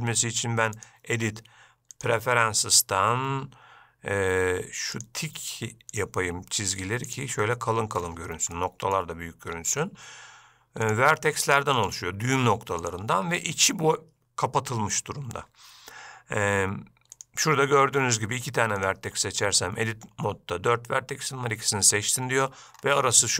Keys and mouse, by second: 1.0-2.4 drag, 8.7 shift+middle click, 9.9 click, 12.0 click, 13.0 click, 19.0 shift+click.